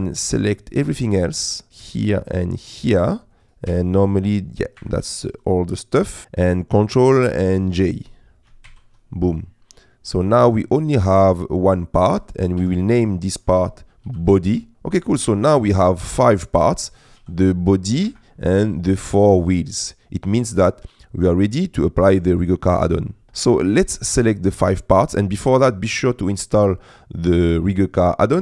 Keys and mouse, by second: 0.0 click, 3.7 g, 4.8 Escape, 8.8 ctrl+j, 12.6 F2, 15.1-16.1 middle drag, 16.8 click, 17.1 click, 17.3 g, 18.1 Escape, 19.0 middle click, 20.5 middle click.